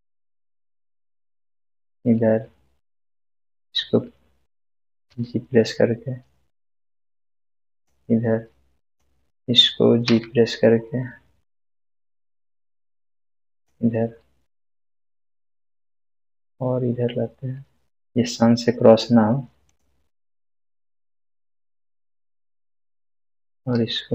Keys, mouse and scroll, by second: 1.7 click, 5.1 g, 7.7 g, 7.7 click, 10.0 g, 13.5 g, 15.6 click, 16.1 g, 19.6 g, 19.7 click, 23.2 click, 23.7 g.